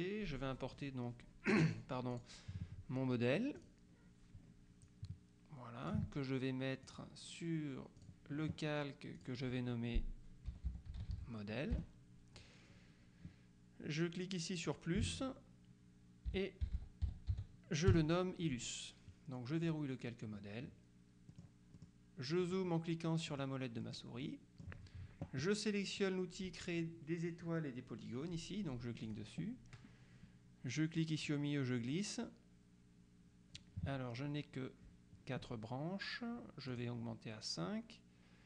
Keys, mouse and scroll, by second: 2.2 click, 3.7 click, 5.0-6.5 drag, 7.0 click, 8.1 click, 9.2 click, 10.4-11.5 typing, 14.8 click, 16.1-17.9 typing, 18.0 Return, 19.7 click, 21.4-22.4 middle drag, 22.5 middle click, 23.4 middle click, 24.3 middle click, 29.1 click, 31.0-34.2 drag, 36.8 click.